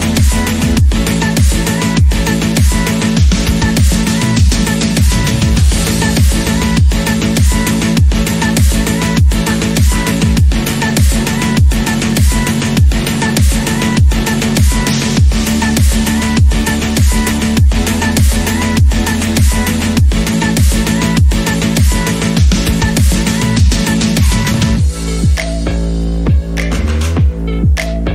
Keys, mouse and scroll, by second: 0.4 e, 2.6 e, 4.2 Tab, 4.4-4.9 scroll down 4, 4.9 click, 5.2 alt+z, 5.3 scroll down 1, 5.5-6.9 middle drag, 6.9-7.4 scroll down 6, 7.4 click, 8.1 shift+click, 8.5 KP_7, 9.1 shift+middle click, 9.3-10.3 scroll up 6, 9.5 shift+middle drag, 10.3 click, 11.6 scroll down 1, 11.8-12.2 middle drag, 12.2 scroll down 2, 12.5 click, 12.9-13.5 middle drag, 13.5 KP_1, 13.9 scroll up 4, 14.2-14.5 shift+middle drag, 14.8 click, 15.7 Tab, 16.1 shift+middle click, 16.5 alt+z, 17.0-18.6 shift+middle drag, 18.6-18.9 scroll up 1, 18.9 click, 19.7 click, 21.1 click, 22.0 shift+click, 22.8 click, 23.7 click, 24.9 shift+click, 25.9 click, 26.6 click, 27.8 shift+middle click.